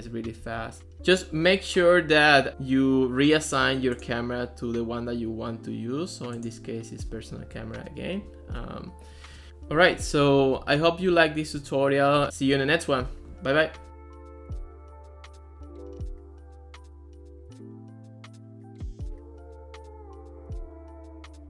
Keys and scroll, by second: 0.0-1.3 typing.